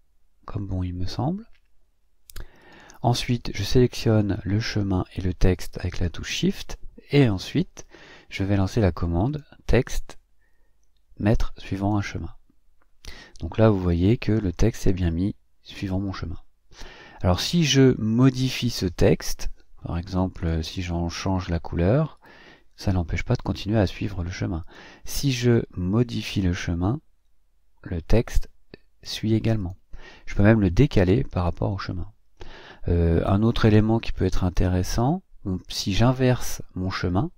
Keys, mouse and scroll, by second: 0.0-1.3 drag, 2.6 click, 5.5 shift+click, 22.1 o, 26.1 click, 29.6 o, 30.3 click, 30.8 click, 33.1 click, 34.5 click, 35.9 click.